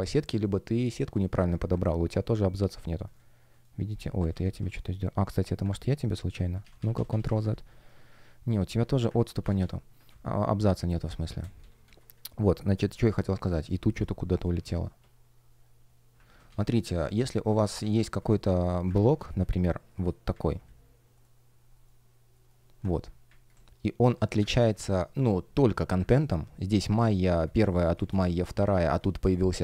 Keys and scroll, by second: 1.6 super+\, 2.8 F1, 2.9 shift+o, 3.4 shift+g, 4.2 super+z, 5.4 shift+o, 5.7 super+z, 7.6 shift+p, 9.1 super+z, 10.0 space, 12.2-13.8 typing, 16.2 super+z, 16.9 space, 18.9 super+z, 19.9 shift+Return, 21.0 shift+g, 21.6 shift+o, 25.0 shift+p, 27.8 space, 29.1 Return.